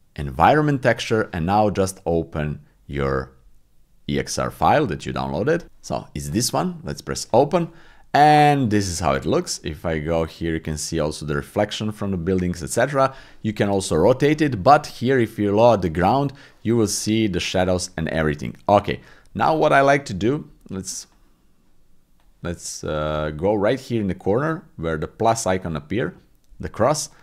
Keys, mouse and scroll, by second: 17.7 click.